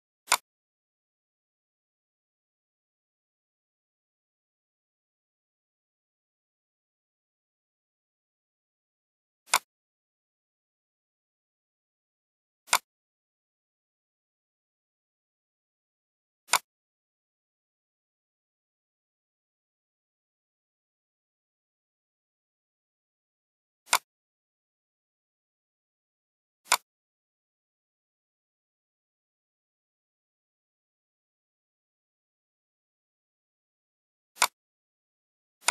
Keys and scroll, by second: 8.8 ctrl+d, 11.2 ctrl+g.